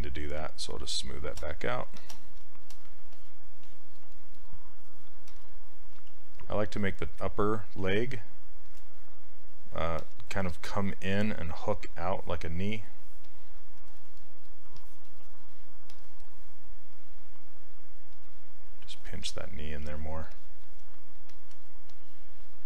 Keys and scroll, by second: 6.0 s, 19.9 s.